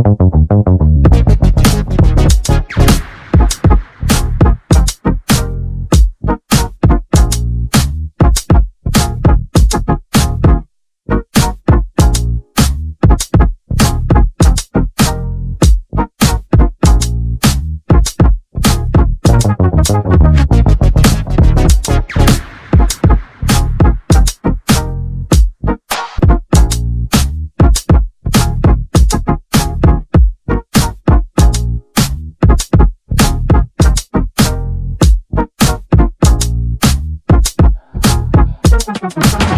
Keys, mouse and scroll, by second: 1.5-3.6 shift+middle drag, 3.6 shift+a, 10.1-12.3 scroll down 2, 12.3 r, 15.5 g, 18.2-18.7 scroll down 1, 18.7-19.9 shift+middle drag, 19.9-20.6 scroll up 3, 20.6-23.1 shift+middle drag, 23.8 Tab, 24.3 click, 25.4 g, 28.8 click, 29.2 click, 30.0 g, 35.1 ctrl+r.